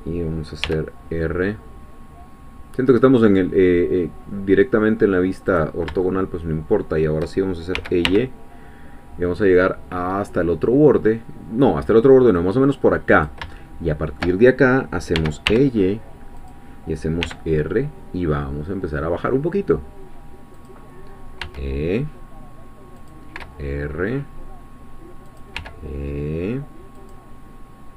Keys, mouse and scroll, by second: 0.6 r, 5.5 click, 6.0-7.2 shift+middle drag, 7.7 e, 8.1 y, 13.1 click, 13.5 shift+middle click, 15.1 e, 15.5 y, 16.4 click, 17.2 r, 20.6 click, 21.4 e, 23.0 click, 23.4 r, 25.3 click, 25.5 e, 26.9-27.9 drag.